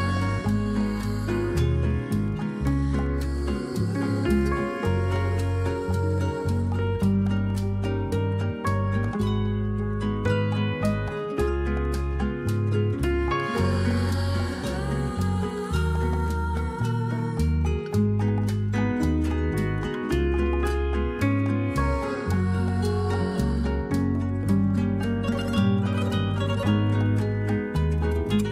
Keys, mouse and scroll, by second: 15.1 typing, 19.0 a.